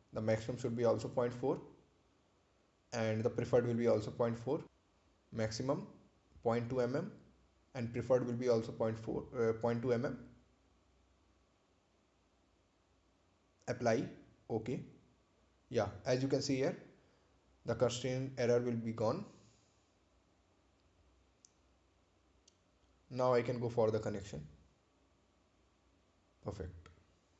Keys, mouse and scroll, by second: 0.1 click, 1.6-2.6 typing, 3.2 Return, 4.4 click, 5.3-6.3 typing, 7.0 Return, 8.5 click, 9.5-10.8 typing, 11.4 Return, 12.7 click, 13.6-14.7 typing, 15.2 Return, 16.3 click, 17.2-18.2 typing, 19.4 Return, 20.4 click, 22.5 scroll down 1, 26.7 click.